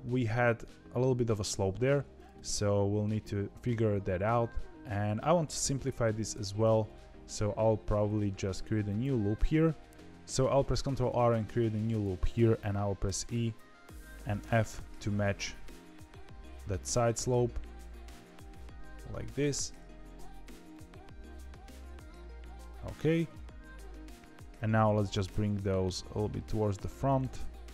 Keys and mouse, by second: 0.2 shift+middle click, 3.4 KP_3, 6.3 ctrl+r, 9.9 ctrl+z, 9.9 KP_3, 10.8 ctrl+r, 20.6-22.5 middle drag, 23.3 KP_3, 25.0 g, 26.9 click, 27.1 g.